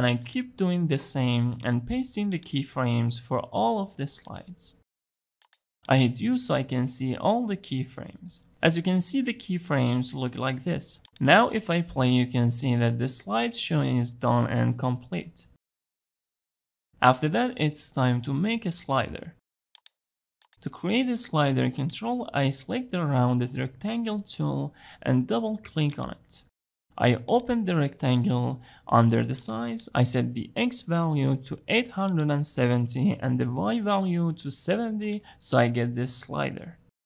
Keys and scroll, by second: 1.1 shift+Page_Down, 2.0 ctrl+v, 3.1 shift+Page_Down, 3.7 ctrl+v.